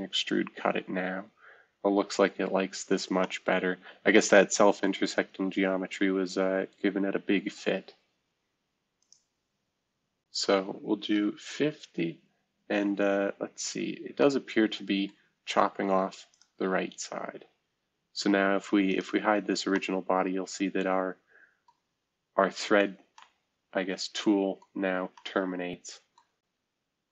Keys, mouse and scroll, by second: 2.0-3.2 scroll up 2, 2.4 middle click, 5.0-6.4 scroll down 3, 11.1 0, 11.7 Tab, 13.1-14.6 scroll up 1, 17.7-18.1 scroll down 1, 19.1 space, 21.8-22.2 scroll down 2, 22.2-23.5 scroll up 2, 24.7-25.1 scroll down 1.